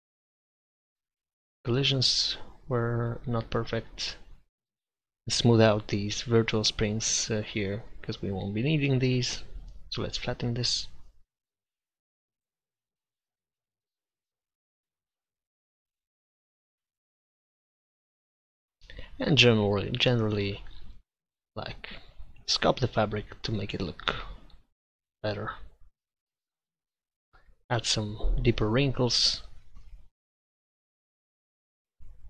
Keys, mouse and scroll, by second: 0.4-4.0 drag, 4.0-6.0 middle drag, 6.4-7.6 drag, 6.4-7.6 right drag, 8.6 middle click, 9.5 click, 10.7-11.7 drag, 12.5-14.3 middle drag, 14.3-15.9 drag, 15.6 ctrl+x, 16.1 ctrl+z, 16.9 click, 17.9-23.6 middle drag, 24.8-27.6 drag, 27.6-29.0 middle drag, 29.3 middle click, 30.3 click.